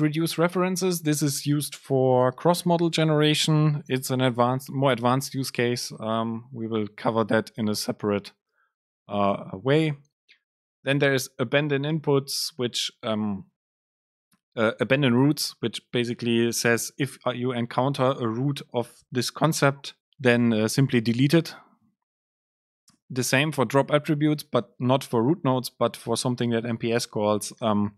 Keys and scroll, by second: 11.2 Up, 23.1 Down.